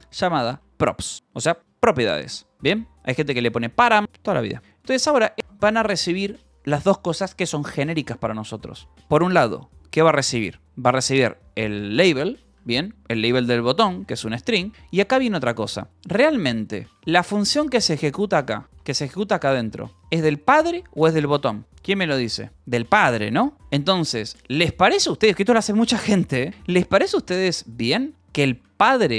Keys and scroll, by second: 0.0-1.3 typing, 1.6 Return, 2.3-4.9 typing, 5.3 Tab, 5.4 Return, 12.5-19.5 typing, 28.1 k, 28.6 j.